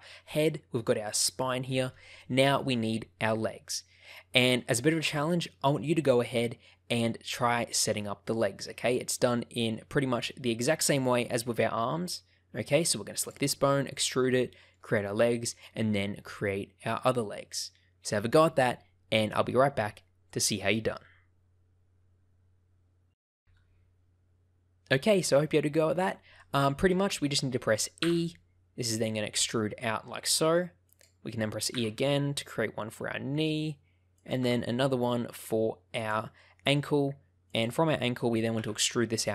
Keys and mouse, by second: 2.1 shift+middle click, 4.8-7.5 shift+middle drag, 9.2 shift+middle click, 13.2 click, 14.5 shift+middle click, 26.3 shift+middle click, 28.0 e, 30.8 click, 31.7 e, 34.1 click, 34.4 e, 35.9 click, 36.3 shift+middle click, 38.5 e.